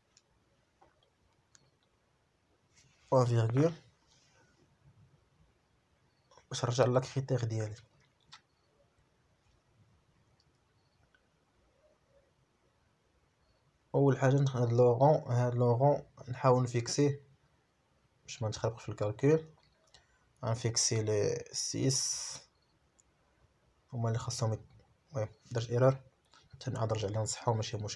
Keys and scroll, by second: 0.4 Caps_Lock, 2.4 Caps_Lock, 5.2-6.9 typing.